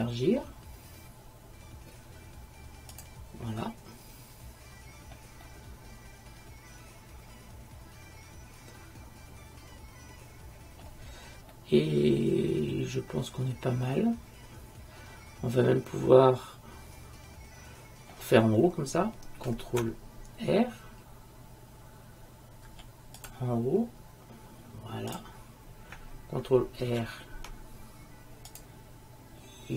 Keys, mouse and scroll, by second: 3.7-5.0 middle drag, 11.7-13.7 middle drag, 22.8 ctrl+r, 23.8 click, 27.0 ctrl+r.